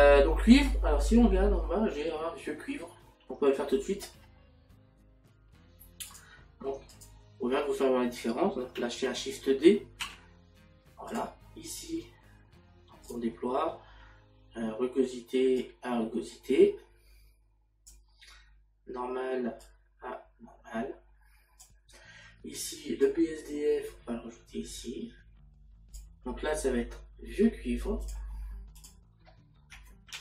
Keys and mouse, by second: 11.1 click, 29.3 click.